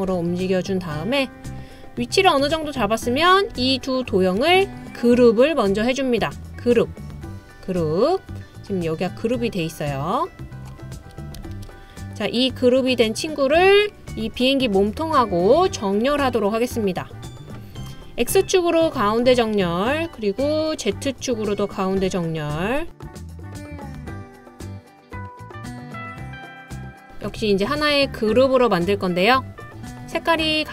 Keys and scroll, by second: 11.6 super+z.